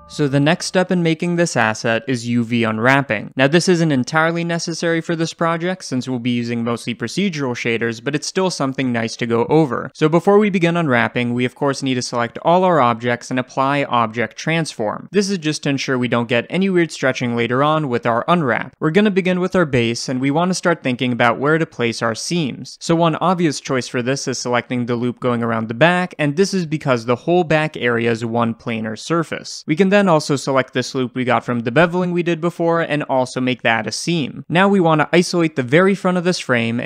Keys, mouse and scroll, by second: 3.0 scroll up 1, 5.4-7.3 drag, 7.0 Tab, 7.3-18.8 middle drag, 12.4 a, 18.8 click, 19.4 h, 19.7 click, 20.0 h, 20.2 click, 20.4 Tab, 21.0-23.0 middle drag, 23.0 click, 23.2 middle click, 23.8 ctrl+click, 24.0 middle click, 24.9 ctrl+click, 25.1-26.4 shift+middle drag, 25.4 scroll up 2, 26.4 ctrl+click, 26.7 middle click, 27.4 ctrl+click, 28.9-30.7 shift+middle drag, 30.7-34.8 alt+drag, 34.8 right click, 34.8 scroll up 1, 35.3-36.8 shift+middle drag, 35.8-36.1 scroll up 1.